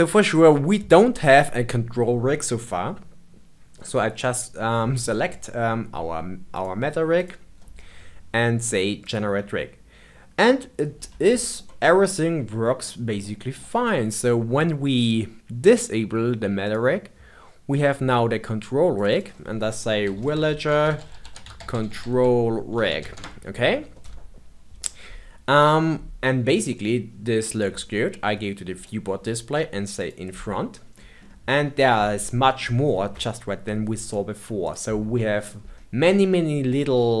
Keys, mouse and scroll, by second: 6.4 click, 7.1 click, 8.9-11.2 drag, 11.2-16.2 shift+middle drag, 16.5 click, 18.9 click, 19.0-20.4 drag, 25.8-28.7 middle drag, 28.7-30.0 drag, 30.9-33.9 middle drag, 33.9 click, 34.6 click, 35.1-35.7 middle drag, 35.7-36.7 scroll up 2, 36.7-37.2 middle drag.